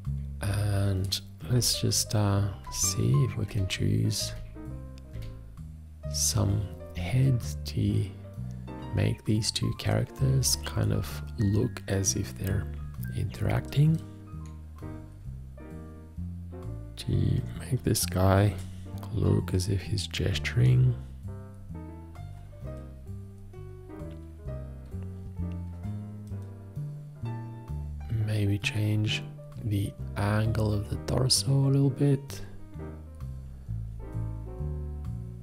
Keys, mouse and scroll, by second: 1.7 shift+., 10.6 8.